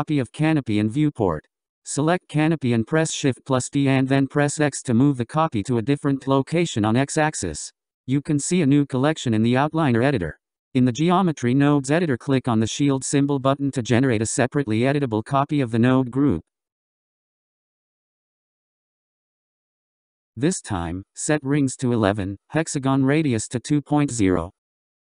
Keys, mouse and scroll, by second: 4.0 shift+d, 14.2-17.4 drag, 18.8-19.8 scroll down 6, 19.8-21.1 scroll up 22, 24.0-25.2 drag.